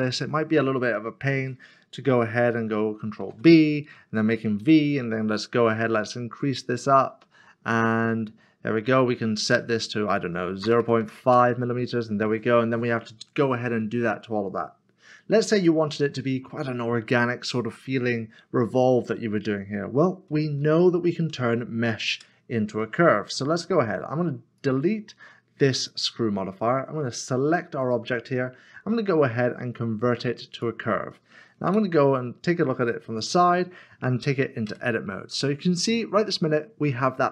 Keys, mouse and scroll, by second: 2.1 click, 3.2 ctrl+b, 5.8-6.5 scroll down 1, 6.5-6.9 scroll up 1, 6.9-7.8 scroll down 1, 7.8-8.6 scroll up 1, 8.6 typing, 10.6-11.0 typing, 12.3 middle click, 15.6 middle click, 20.0 middle click, 20.3 ctrl+z, 22.1 Tab, 24.6 Tab, 30.5 click, 32.6-33.3 scroll up 1, 34.6 3, 35.6-37.3 scroll down 1.